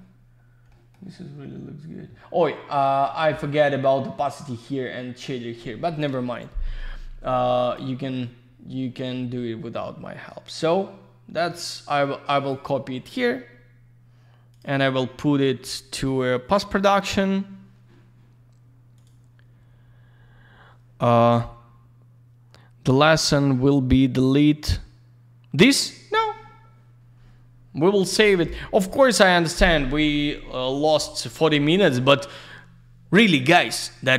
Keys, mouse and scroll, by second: 0.2 scroll up 1, 0.7 middle click, 2.6 scroll up 1, 3.0 middle click, 3.2 middle click, 4.2 scroll down 1, 6.5 scroll down 1, 7.6 click, 10.2-11.0 scroll up 1, 11.0-11.3 scroll down 1, 12.3 click, 14.5 click, 14.6 click, 18.9 click, 19.0 click, 23.6 click.